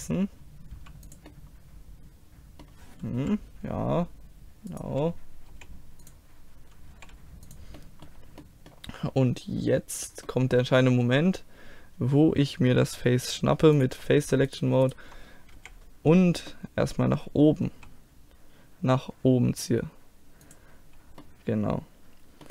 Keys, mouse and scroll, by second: 0.8 g, 1.3 middle click, 3.2 KP_1, 4.7 right click, 5.6 r, 7.0 g, 7.9-12.4 middle drag, 13.8-15.9 drag, 14.5-15.6 right drag, 15.6 KP_1, 16.7-17.7 middle drag, 17.7 e, 21.3-22.5 middle drag.